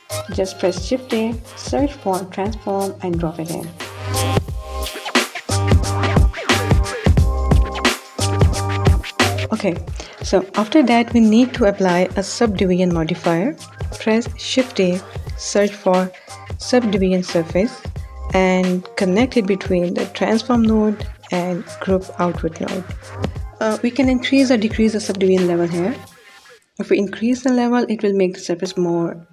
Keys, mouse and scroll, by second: 5.6 click, 13.3 shift+a, 20.5 click, 21.8-23.8 drag.